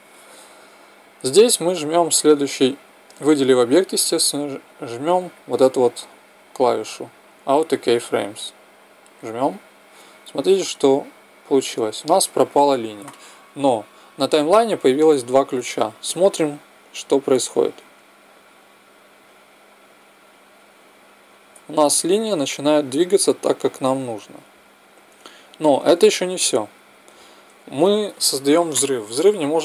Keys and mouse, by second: 4.6-6.4 drag, 8.6-10.5 drag, 24.2 right click, 24.2 click, 25.7 right click.